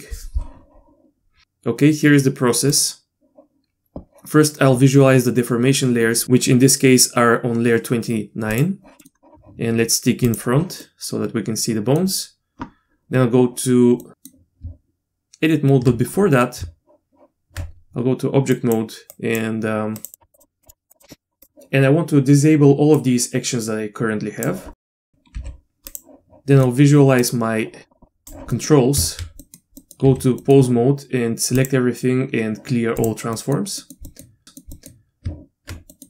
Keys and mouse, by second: 9.0 middle click, 10.2 click, 10.8-12.0 middle drag, 14.0-14.6 middle drag, 14.6 Tab, 16.6 Tab, 18.7 click, 20.3 click, 20.6 click, 20.9 click, 21.4 drag, 23.0-24.4 drag, 24.8 middle click, 24.9 n, 25.3 n, 25.9 click, 26.6 middle click, 27.2-28.3 drag, 28.5 middle click, 28.9 Tab, 29.4 middle click, 29.8 middle click, 30.1 a, 30.4 middle click, 31.7-33.1 drag, 33.3 middle click, 33.8 middle click, 34.1 middle click, 34.4 middle click, 34.4 n, 34.7 middle drag, 35.7 Tab, 35.9 middle click.